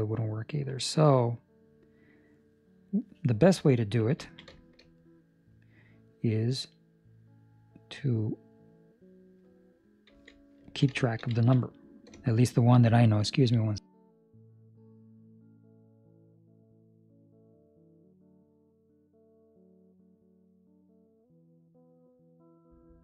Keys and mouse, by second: 4.3 ctrl+middle click, 4.7 shift+middle click, 8.1 middle click, 10.0 z, 10.6 ctrl+middle click, 11.1 shift+middle click, 11.4 ctrl+middle click, 11.5 middle click, 12.4 shift+middle click, 19.0 middle click.